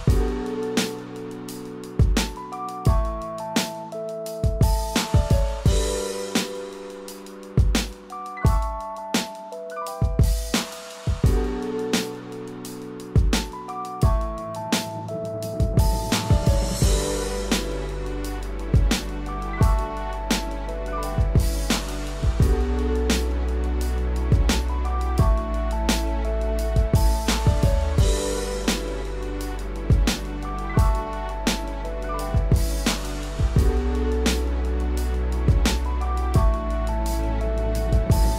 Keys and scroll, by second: 9.0 ctrl+-, 11.1 ctrl+=, 11.7 ctrl+=, 13.2 ctrl+-, 20.7 ctrl+=.